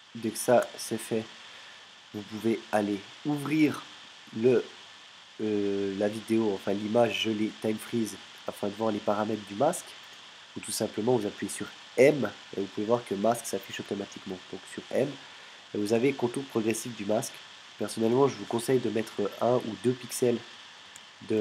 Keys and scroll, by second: 12.1 m, 13.7 m, 20.9 2.